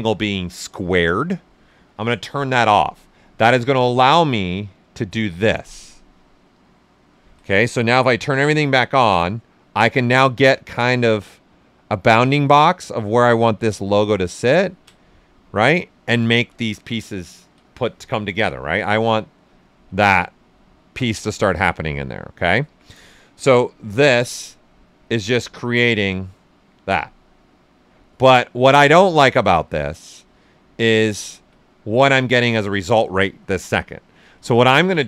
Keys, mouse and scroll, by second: 1.9-7.0 ctrl+drag, 7.0 ctrl+z, 8.0 click, 8.6 typing, 8.9-14.6 ctrl+drag, 12.6 ctrl+space, 15.9 ctrl+z, 18.6-21.2 ctrl+drag, 21.2-22.6 right drag, 22.6 ctrl+z, 23.5 click, 24.1-26.5 ctrl+drag, 26.5 ctrl+z, 27.2 ctrl+click, 27.9 ctrl+space, 34.3 ctrl+z.